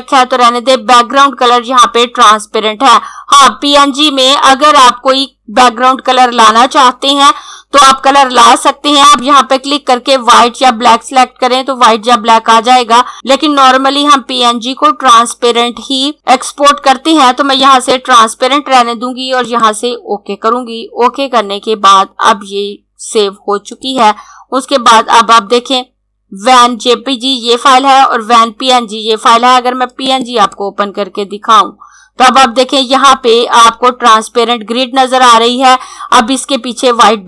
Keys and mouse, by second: 8.7 click, 17.6 click, 23.6 click, 29.6 click.